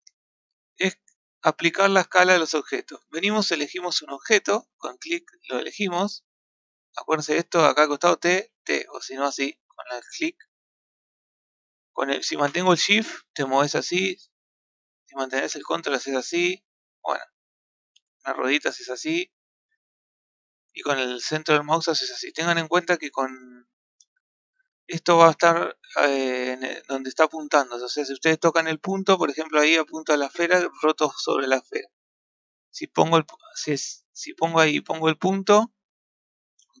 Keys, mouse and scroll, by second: 4.3 middle click, 5.9 t, 7.2 t, 8.0 t, 8.4 t, 10.1-11.1 drag, 11.1-17.5 shift+middle drag, 17.5-17.9 scroll down 5, 17.9-18.2 scroll up 5, 18.2-18.5 scroll down 5, 18.5 scroll up 3, 18.7-19.5 scroll down 2, 19.5-22.0 middle drag, 23.1-27.7 middle drag, 28.6 click, 29.3 KP_Decimal, 30.2-30.7 scroll down 9, 30.8-31.8 middle drag, 31.8 scroll down 5, 32.2-32.7 scroll up 2, 32.8 click, 34.6 KP_Decimal, 35.7 scroll down 2, 35.8-36.8 middle drag.